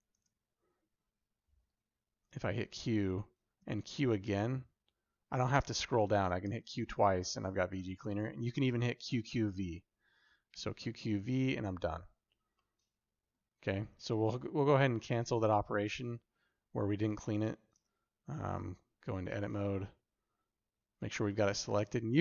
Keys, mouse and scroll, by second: 0.0 ctrl+space, 2.3 q, 6.1 q, 6.3 q, 10.4 q, 10.5 q, 12.5 middle click, 14.0 ctrl+z, 14.7 ctrl+z, 15.1 ctrl+z, 16.1 ctrl+z, 17.6 Tab, 18.5 alt+z, 19.6 1, 21.8 Tab.